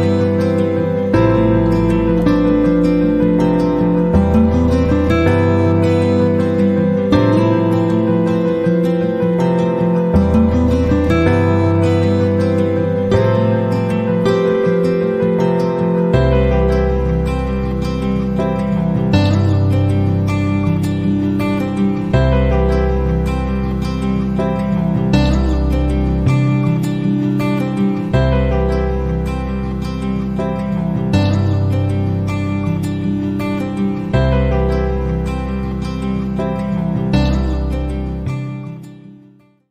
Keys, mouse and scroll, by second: 1.9 click, 3.9 click, 7.9 click, 10.0 click, 10.5 click, 12.7 click, 15.7 click, 16.6 click, 18.2 click, 19.0 click, 20.0 click, 21.8 click, 25.0 click, 26.9 click, 28.1 click, 30.0 click, 31.7 click, 33.3-34.7 drag, 35.8-36.8 drag, 37.4 click.